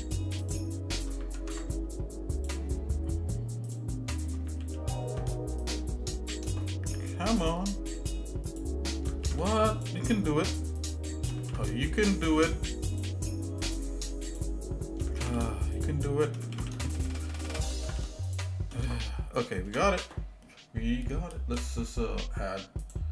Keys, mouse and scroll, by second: 0.6 shift+click, 1.4 ctrl+Tab, 3.7 shift+click, 4.6 ctrl+z, 5.6 shift+click, 6.6-8.1 shift+middle drag, 8.5 shift+click, 9.3 ctrl+z, 9.7 shift+click, 10.9 shift+click, 11.5 ctrl+z, 12.1 shift+click, 13.1 shift+click, 13.6 shift+click, 14.3 shift+click, 15.2 ctrl+z, 15.8 shift+click, 16.5 ctrl+z, 17.0 shift+click, 17.8 ctrl+z, 18.3 shift+click, 19.0 shift+middle click, 22.8 click.